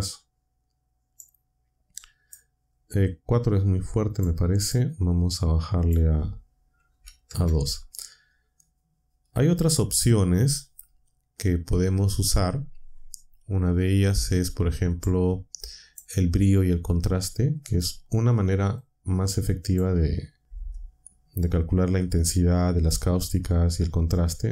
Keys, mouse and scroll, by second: 1.1-2.5 drag, 4.1 click, 5.8 click, 6.7-7.4 typing, 15.0-16.1 drag, 18.7-19.9 drag.